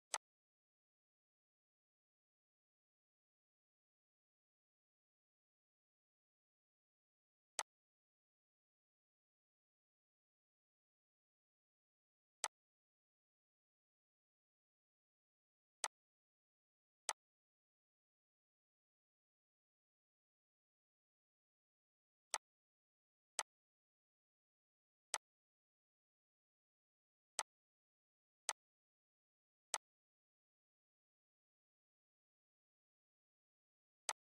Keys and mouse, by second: 12.1 click, 15.5 click, 16.7-21.9 alt+drag, 27.0-33.7 drag.